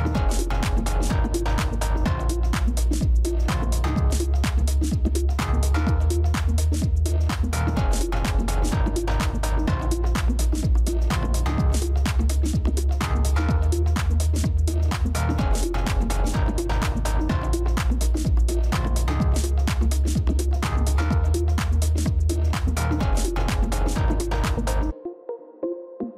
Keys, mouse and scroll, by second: 7.7 Delete, 13.7 right click.